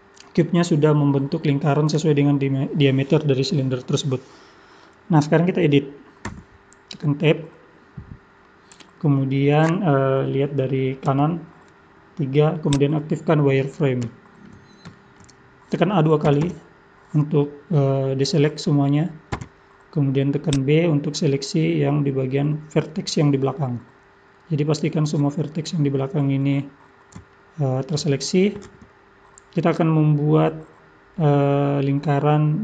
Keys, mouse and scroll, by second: 6.2 Tab, 7.4 middle click, 11.0 KP_3, 12.7 click, 14.1 shift+middle click, 15.4-16.3 scroll up 2, 16.3 a, 16.4 a, 19.4 b, 23.4-23.8 scroll up 4, 24.3-26.8 scroll down 1, 26.8-27.2 scroll down 1, 27.3 shift+middle click.